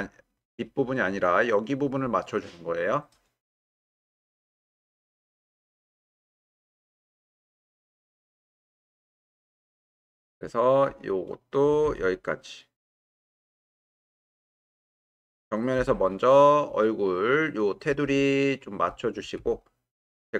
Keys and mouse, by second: 5.4-6.3 drag, 9.1 w, 11.0 click, 11.8 g, 13.8 click, 15.0 click, 15.8 g, 19.4 g.